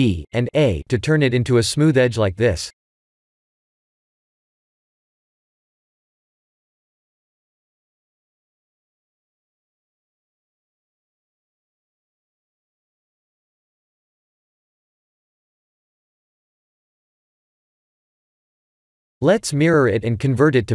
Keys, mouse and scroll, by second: 0.1 click, 0.5 shift+click, 1.0 r, 4.0 Tab, 4.7 Tab, 6.1 click, 6.6 shift+click, 7.1 r, 8.9 Tab, 10.3 Tab, 10.6 Tab, 11.1 Tab, 11.8-12.9 scroll up 4, 12.9 click, 13.7 g, 15.9 Tab, 17.4 Tab, 19.2 click, 19.8 click.